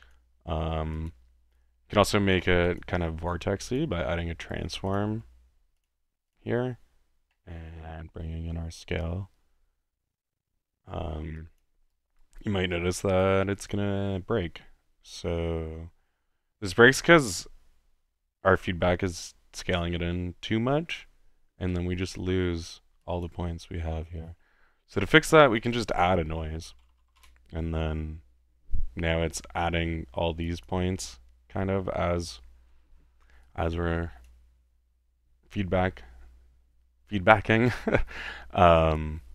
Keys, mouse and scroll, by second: 1.0-1.6 drag, 2.7-4.1 drag, 4.4-4.8 drag, 4.9-6.8 drag, 5.1 ctrl+t, 5.8 t, 7.3-10.3 middle drag, 11.4-11.7 drag, 12.2 click, 12.7 click, 13.5-13.8 drag, 22.0-23.0 middle drag, 23.3 click, 23.9-25.6 middle drag, 25.8 click, 25.9-27.7 typing, 26.1 click, 29.8 middle click, 30.5 click, 33.4-34.4 drag.